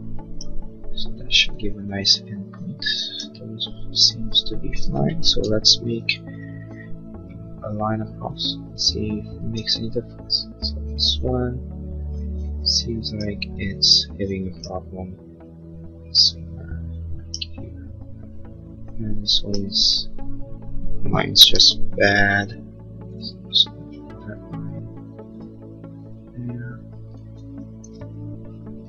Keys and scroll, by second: 5.3 l, 21.4 l.